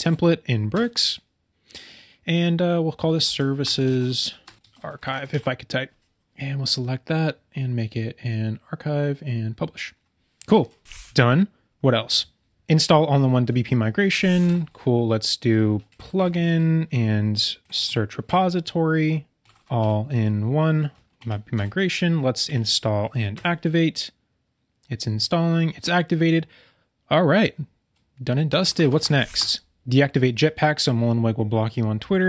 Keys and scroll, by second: 3.6 BackSpace, 3.8 shift+s, 4.6 BackSpace, 14.4 super+k, 17.7 Down, 21.1 Down, 28.5 BackSpace.